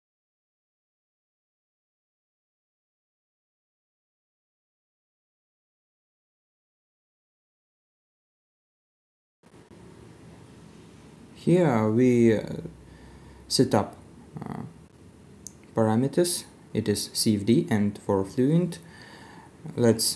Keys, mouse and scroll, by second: 12.3 scroll down 1.